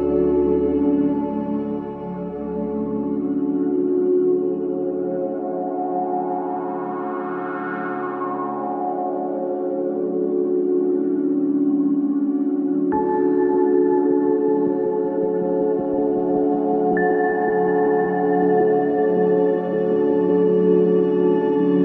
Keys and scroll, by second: 0.0-0.6 typing, 11.1 space, 15.6 space, 20.8 space.